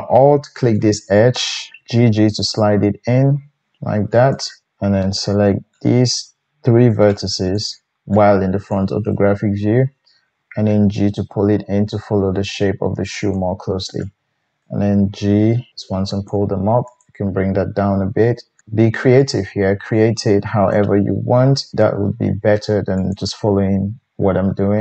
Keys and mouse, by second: 0.9 alt+right click, 1.8 g, 5.7-9.0 middle drag, 5.7-9.0 right drag, 10.7 g, 13.4 click, 15.5 g, 16.3-24.8 drag, 16.9 right click, 17.8 g, 18.6 g, 22.9 middle click, 22.9 right click, 24.2 g.